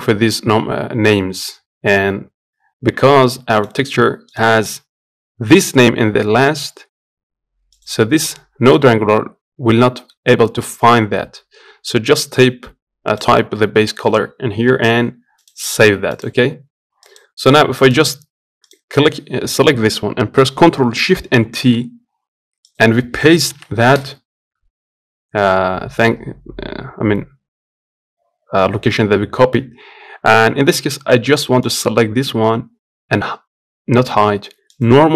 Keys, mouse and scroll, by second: 5.6-15.1 drag, 18.4-21.3 drag, 21.3 ctrl+shift+t.